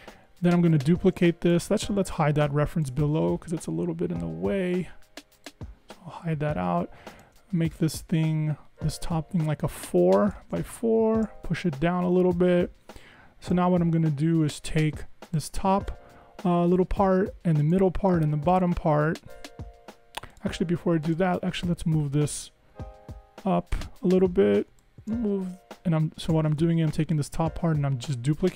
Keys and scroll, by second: 11.6 Down, 22.3 Up, 22.7 Up, 26.7 super+z.